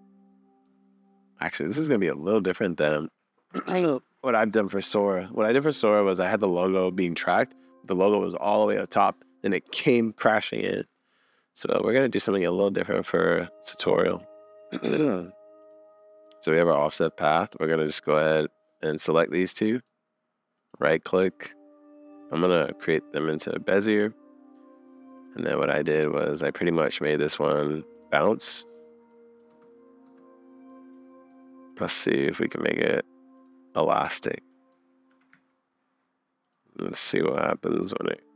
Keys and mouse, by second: 13.0-13.9 drag, 15.6 click, 16.2-18.0 drag, 18.1 click, 19.0 click, 20.6-22.5 drag, 29.5 space, 30.0 space, 30.7 click, 31.7-33.4 drag, 33.9 click, 34.6 click, 35.1 g, 37.0 click, 37.3 click.